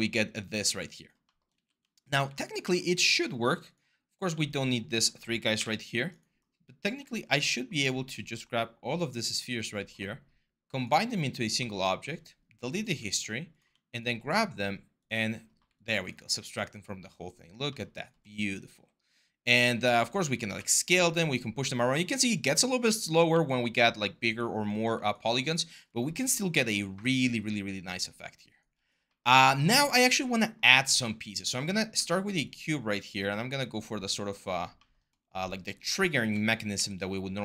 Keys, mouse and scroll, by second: 1.3 q, 5.3 Delete, 18.4 r, 20.3 w, 22.6 ctrl+z, 23.1 ctrl+z, 31.7 w, 33.4 r, 36.5 w.